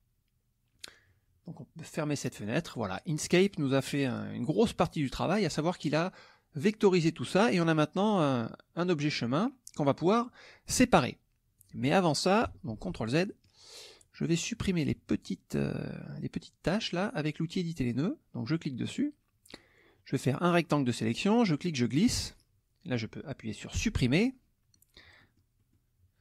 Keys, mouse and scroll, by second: 2.0 click, 2.4 click, 3.3 middle click, 4.5-5.5 drag, 8.1 click, 11.5 click, 12.7 ctrl+z, 13.3 ctrl+middle click, 14.1 middle click, 14.5 middle click, 15.6 middle click, 18.6 click, 21.4-22.5 drag, 23.7 Delete, 24.7 middle click.